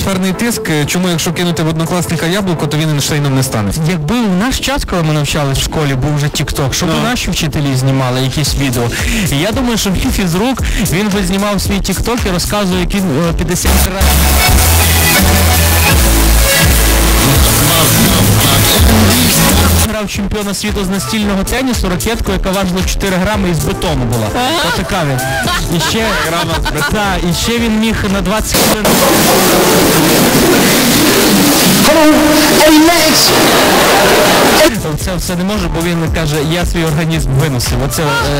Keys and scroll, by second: 20.4 Page_Down, 35.2 Page_Down.